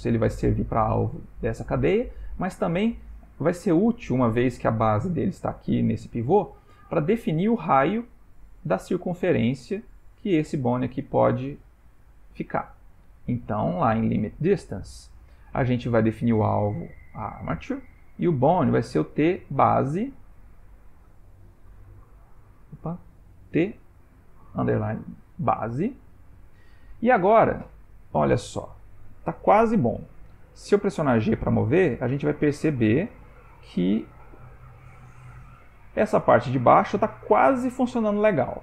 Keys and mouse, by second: 1.1 click, 2.2 click, 10.2 click, 13.2 click, 16.2 click, 18.6 click, 22.8 click, 29.5 ctrl+middle click, 31.0 g.